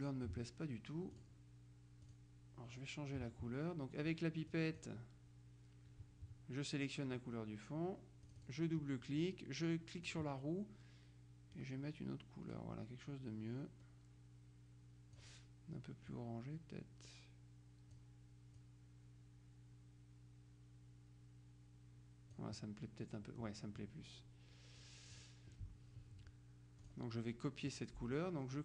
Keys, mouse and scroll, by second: 1.3 click, 2.1 click, 4.6 click, 8.3 click, 10.1 click, 11.7-15.8 drag, 16.2-18.5 drag, 18.7-22.9 drag, 25.3 click, 26.9 click.